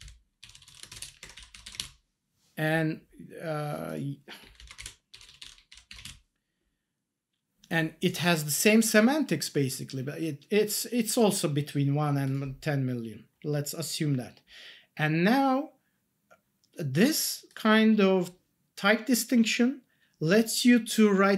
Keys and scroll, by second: 0.0 ctrl+shift+Left, 0.2-1.5 typing, 4.4 Left, 4.9-5.9 typing, 6.0 ctrl+s.